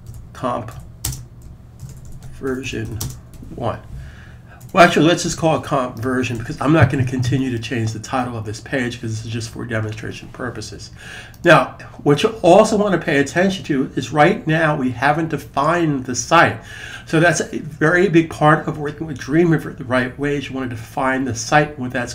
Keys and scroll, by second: 0.0-3.2 typing, 4.4 typing, 6.2 super+s.